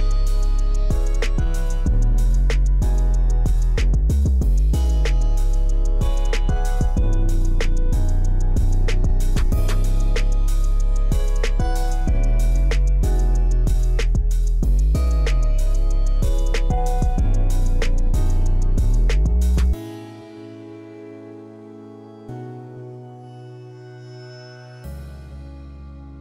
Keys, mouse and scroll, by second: 0.8-3.1 shift+middle drag, 3.7-5.1 shift+middle drag, 6.3-8.6 shift+middle drag, 9.5-10.6 shift+middle drag, 10.8 scroll down 1, 10.9 shift+middle click, 11.1 shift+middle click, 12.1-13.5 shift+middle drag, 14.3-15.4 shift+middle drag, 15.9-16.5 shift+middle drag, 17.0-17.4 shift+middle drag, 17.8-18.1 shift+scroll up 1, 18.1 shift+scroll down 1, 18.9-20.9 shift+middle drag, 21.4-23.3 shift+middle drag, 24.5 shift+F8.